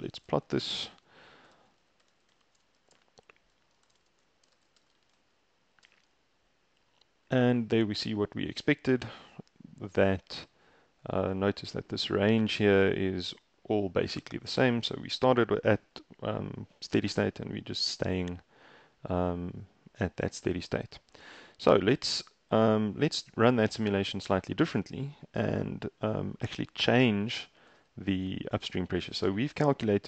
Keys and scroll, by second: 0.0 Return, 1.3-5.5 typing, 5.9 shift+Return.